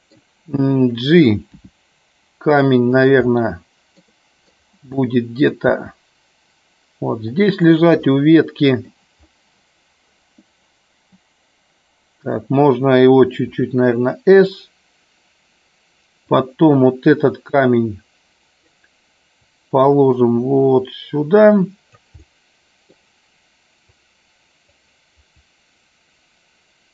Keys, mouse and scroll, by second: 2.9 click, 3.2 middle click, 4.1 middle click, 4.8 middle click, 7.6 click, 7.9-8.8 middle drag, 14.5 click, 16.2 click, 17.6 click, 19.6-21.9 drag, 22.1-22.9 middle drag, 23.8 click, 25.3-26.9 drag.